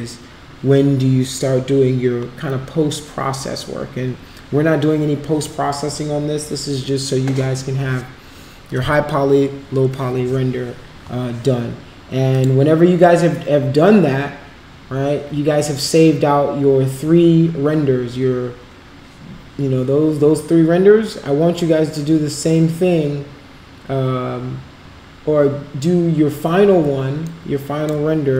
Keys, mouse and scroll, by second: 12.3 click, 18.0 space, 26.8 space, 27.2-27.8 drag.